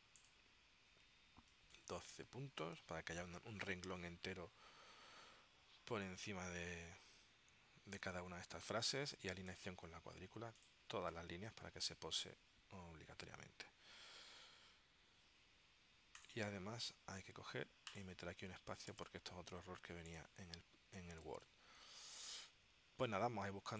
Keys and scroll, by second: 2.3-3.4 typing, 3.7 Tab, 19.1 space, 21.4 space.